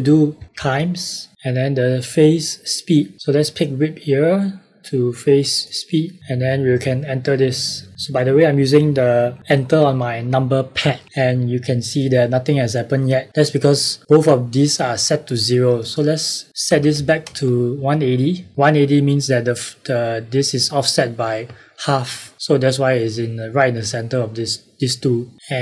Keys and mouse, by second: 15.7 click, 16.6 KP_1, 16.9 KP_8, 17.2 KP_0, 17.7 KP_Enter.